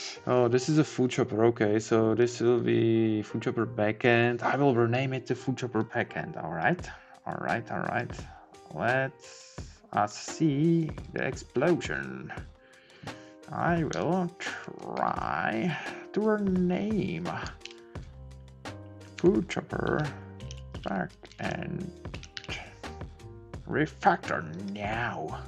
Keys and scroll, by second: 14.0 Left, 14.6 Up, 18.1 shift+F6.